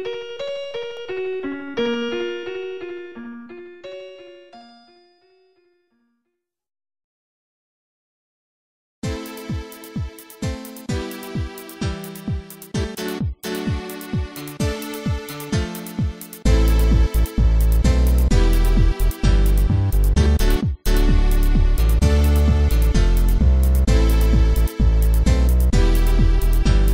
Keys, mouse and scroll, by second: 0.0-0.3 typing, 2.1 scroll down 1, 2.7 middle click, 6.3 click, 6.9 click, 8.0 s, 9.4 scroll up 1, 16.4 click, 18.5 ctrl+z, 19.3 s, 19.9 scroll up 1, 21.7 scroll up 1.